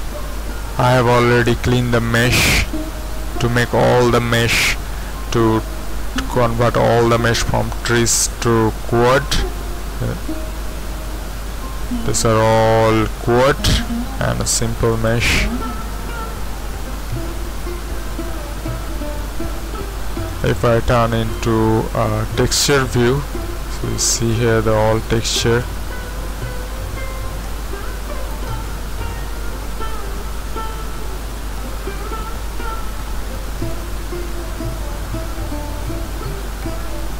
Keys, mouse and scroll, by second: 2.4 middle click, 10.9-14.7 middle drag, 14.7 shift+z, 15.7 Tab, 17.4 Tab, 18.7 z, 19.2-20.4 middle drag, 19.2 scroll up 1, 20.4 click, 21.3 click, 22.1 middle click, 30.5 middle click, 30.8 middle click, 31.5-32.7 middle drag, 33.0 middle click, 35.7 middle click, 36.0 ⌨.